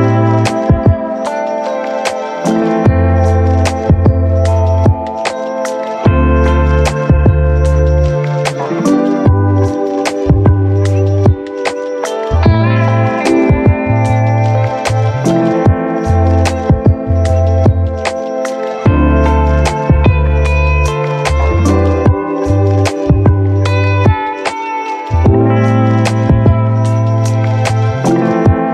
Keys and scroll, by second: 1.0 ctrl+z, 1.4 space, 2.0 v, 2.4 space, 12.3 1, 13.6 ctrl+1, 14.8 d, 22.2 ctrl+d.